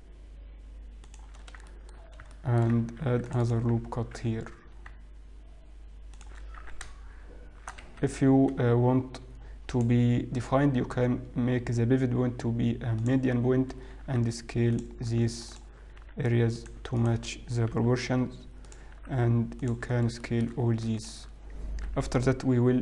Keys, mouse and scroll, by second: 1.5-2.3 scroll down 4, 2.3 shift+middle click, 2.3 scroll up 3, 2.8 shift+middle click, 3.3 ctrl+r, 4.6 g, 7.1 s, 9.8 click, 14.7-16.4 scroll up 1, 14.7 s, 16.4 alt+click, 16.4 s, 17.9 alt+click, 17.9 g, 19.7 s, 20.9 shift+middle click, 20.9-21.3 scroll down 4, 21.3 alt+click.